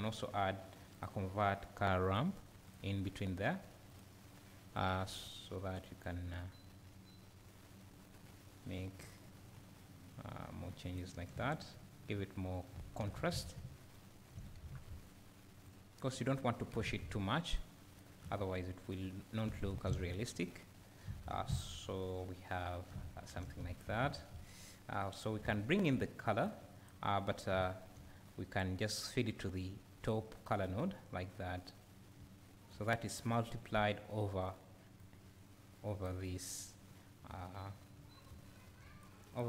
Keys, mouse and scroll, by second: 6.1-26.5 drag, 11.4 `, 18.3 `, 21.6-21.9 scroll up 2, 21.9 `, 23.0 scroll down 1, 24.0 `, 30.1-39.4 drag, 32.3 `, 37.7 `.